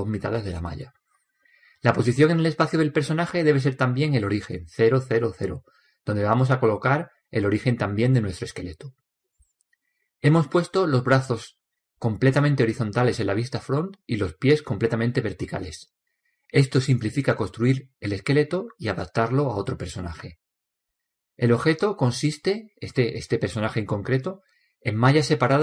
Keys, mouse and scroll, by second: 1.6-3.6 middle drag, 3.8-4.9 middle drag, 7.1-9.1 middle drag, 13.4 KP_1, 18.4 KP_3, 20.3 KP_7, 21.5 KP_1, 22.4-24.2 middle drag, 24.4 Tab, 25.1-25.6 middle drag.